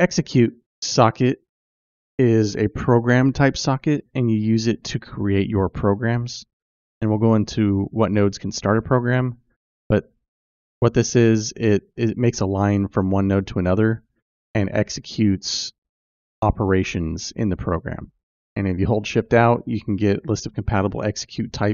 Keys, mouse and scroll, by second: 0.0-21.7 drag.